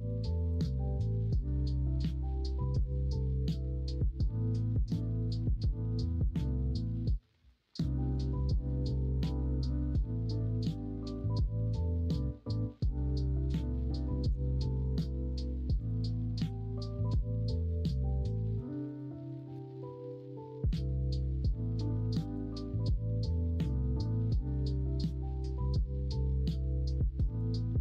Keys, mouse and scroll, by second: 0.1 click, 0.7 middle click, 1.1 s, 7.3 middle click, 8.8 shift+middle click, 10.5 middle click, 12.0-13.8 middle drag, 13.8 r, 16.1 middle click, 18.0 middle click, 18.3 3, 22.5-27.8 middle drag.